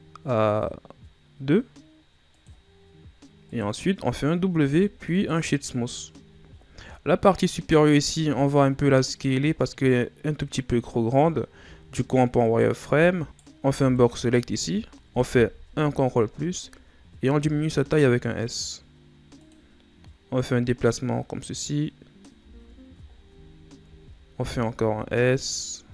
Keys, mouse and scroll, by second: 2.3-4.5 drag, 4.5 w, 6.4-7.2 shift+scroll up 8, 8.1 Tab, 9.0 right click, 11.5 z, 12.4 right click, 12.8 b, 13.2 right click, 13.6 b, 15.7 ctrl+KP_Add, 17.3 s, 20.3-22.4 drag, 22.4 z, 22.6-23.4 scroll down 9, 23.4-24.0 scroll up 2, 24.3 s.